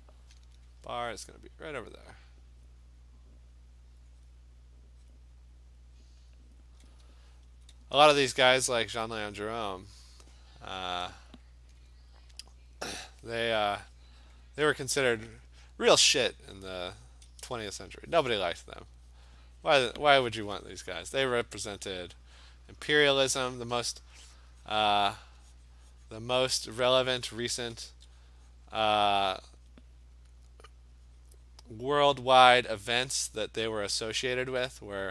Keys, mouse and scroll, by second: 2.7 click, 3.3 click, 4.3 click, 5.1 click, 6.1 click, 6.5 click, 7.5 alt+click, 7.6 alt+click, 7.8 ], 8.0 ], 8.2 ], 8.6 ], 8.8 click, 9.2 click, 9.4 click, 10.2 click, 11.1 alt+click, 13.3 click, 14.1 click, 14.3 click, 14.8 alt+click, 16.2 click, 16.4 click, 16.8 click, 17.1 click, 17.4-19.4 alt+click, 17.4 ], 17.6 ], 17.7 click, 17.8 click, 18.0 click, 18.2 click, 18.7 click, 19.1 click, 19.3 alt+click, 19.4 click, 20.0 click, 21.5 click, 21.7 click, 22.0 click, 22.5 click, 22.6 click, 23.0 click, 23.9-24.3 alt+click, 24.3 click, 24.7 click, 25.2 click, 25.7 click, 26.2 click, 26.7 alt+click, 27.2 [, 27.4 [, 27.6 [, 27.9 [, 28.3 click, 28.6 click, 28.8 click, 29.2 click, 29.7 click, 31.7 click, 31.9 click, 32.4 click, 33.3 click, 33.8 click, 34.7 click.